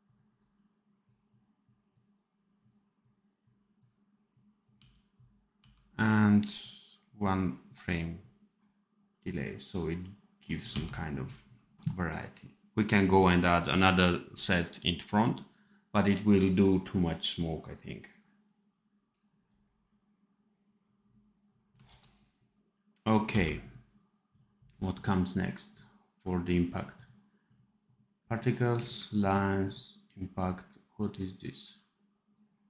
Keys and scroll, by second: 4.7 d, 5.5 d, 10.6 d, 21.8 ctrl+s, 23.2 d.